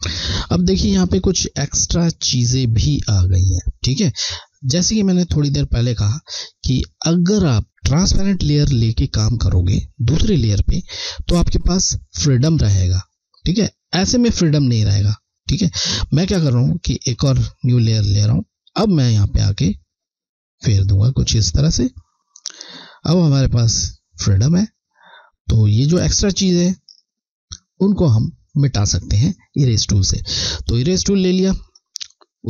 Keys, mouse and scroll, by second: 1.4 scroll, 2.4-4.4 alt+scroll up 1, 5.1 ctrl+z, 6.4 alt+scroll down 1, 17.1 click, 27.0 scroll, 27.1 alt+scroll up 1, 30.6 click, 30.7 click.